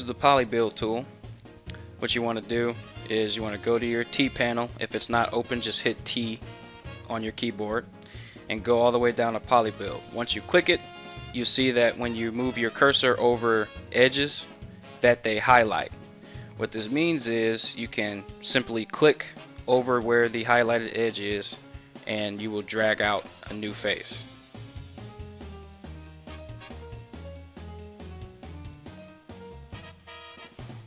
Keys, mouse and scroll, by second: 4.7 t, 6.8 t, 9.8-24.0 drag, 24.0 ctrl+z.